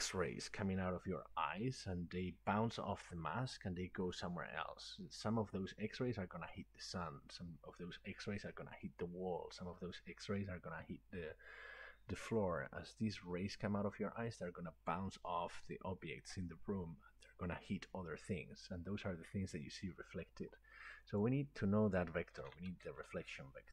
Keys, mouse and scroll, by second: 21.3 click, 22.2-23.5 typing.